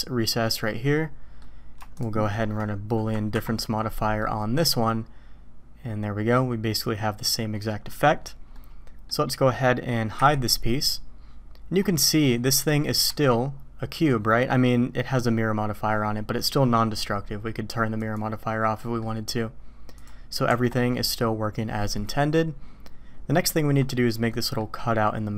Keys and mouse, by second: 0.6-1.4 drag, 3.3 ctrl+KP_Subtract, 4.2-6.3 drag, 7.6 click, 8.5 click, 10.1 h, 13.0 Tab, 14.4 click, 18.0 click, 18.5 middle click, 20.0 click, 20.5 Tab, 24.4 middle click.